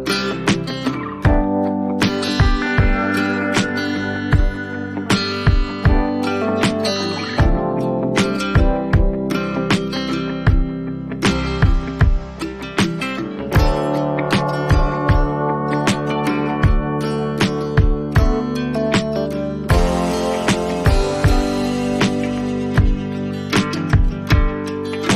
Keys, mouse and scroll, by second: 3.4 click, 4.2 click, 4.6 click, 6.9 click, 7.7-8.3 alt+scroll down 4, 8.6-9.1 alt+scroll down 6, 9.3 alt+scroll, 11.6 click, 12.7 click, 13.5 ctrl+j, 15.8 ctrl+t, 18.4 shift+click, 20.7 click, 21.2-22.8 alt+scroll, 22.8-23.6 alt+scroll.